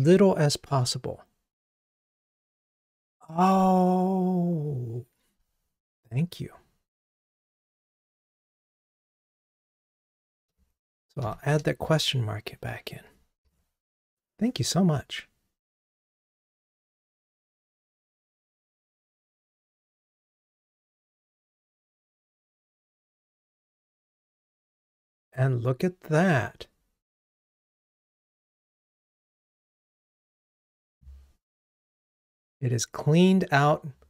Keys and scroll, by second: 13.3 ctrl+r.